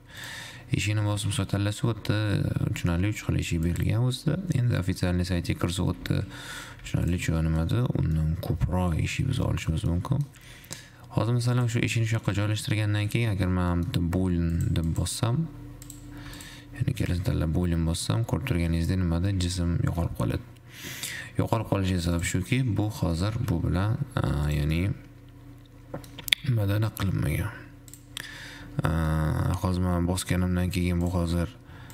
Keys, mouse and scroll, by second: 0.4-3.4 drag, 4.9 scroll down 1, 5.0-6.4 middle drag, 6.4 g, 7.6 shift+middle click, 7.9-8.4 scroll up 4, 8.4-10.6 middle drag, 10.6 g, 12.4 `, 12.6-14.9 middle drag, 15.1-16.3 drag, 17.3-17.9 drag, 17.9 scroll down 4, 18.4-19.6 middle drag, 19.6 ctrl+z, 20.4-21.9 middle drag, 22.3 click, 22.8-23.3 scroll up 3, 23.3 middle click, 23.5 g, 25.0-26.5 middle drag, 26.5 g, 28.5-29.9 middle drag, 29.9-31.4 scroll down 2, 31.4-31.9 drag.